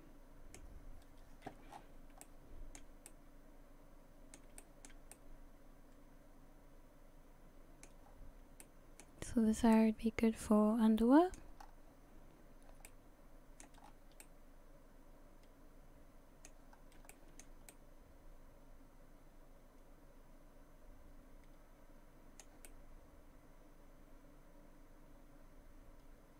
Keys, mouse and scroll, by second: 1.7-2.1 scroll down 8, 2.2 shift+middle click, 3.1 middle click, 4.6 shift+middle click, 5.1 middle click, 8.1 scroll up 4, 8.6 middle click, 9.7 middle click, 11.6-12.8 scroll up 3, 12.9 middle click, 13.8-14.2 scroll down 5, 14.2 middle click, 16.7 scroll up 2, 17.1 shift+middle click, 17.7 middle click, 22.7 middle click, 26.3 middle click.